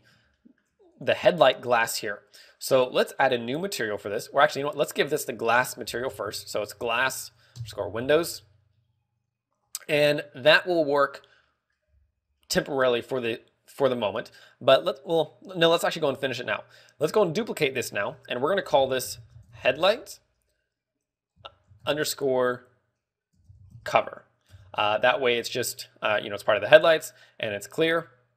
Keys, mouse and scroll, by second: 0.2 click, 0.9 shift+middle click, 2.1 right click, 5.7 click, 11.6-12.4 scroll down 5, 12.0 middle click, 12.4-13.1 scroll up 4, 12.9 middle click, 17.7 click, 18.2 click.